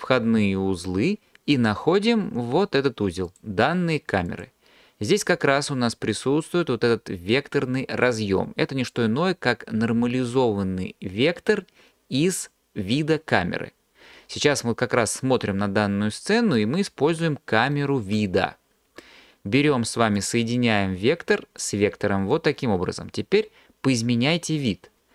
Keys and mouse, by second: 4.3 click, 20.2 drag.